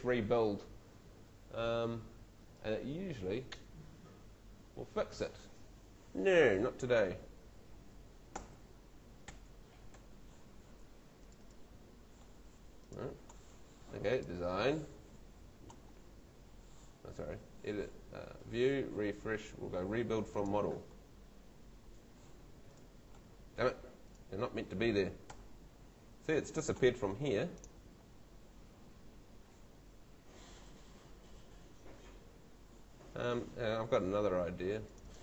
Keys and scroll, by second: 8.3 F2, 9.2 F3, 9.9 F2, 25.3 F2, 30.5 F3, 31.2 F2.